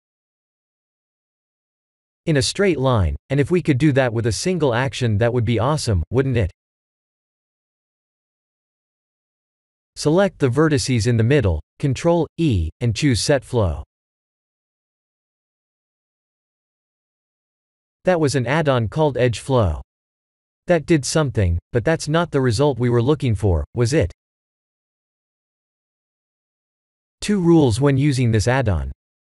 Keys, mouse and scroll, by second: 2.5 click, 4.0 b, 10.1 ctrl+e, 15.3 click, 17.8 click, 19.4 click, 21.7 click, 24.4 middle click, 24.5 middle click, 25.1 middle click, 25.2 middle click, 26.1 middle click, 26.2 middle click, 26.7 middle click, 26.9-27.6 scroll down 6, 27.5 middle click, 28.5 middle click, 28.9 KP_1, 29.2 KP_7.